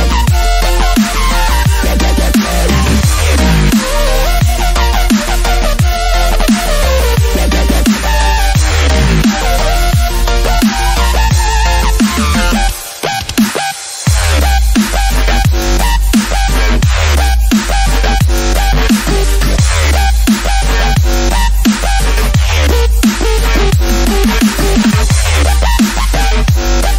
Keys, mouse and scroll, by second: 0.4-4.3 drag, 4.3-7.5 drag, 7.5 click, 12.0-25.6 drag, 25.9-26.9 drag.